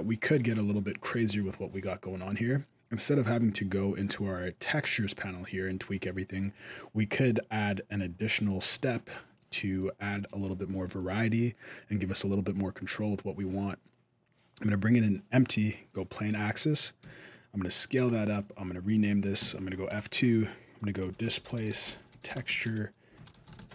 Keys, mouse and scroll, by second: 0.4 middle click, 1.2 middle click, 3.1 click, 7.5 click, 8.2 middle click, 8.2-8.5 scroll up 1, 8.9 shift+middle click, 9.6 middle click, 9.9 shift+a, 15.7 scroll down 2, 15.9 middle click, 16.8 s, 17.9 middle click, 19.8 F2.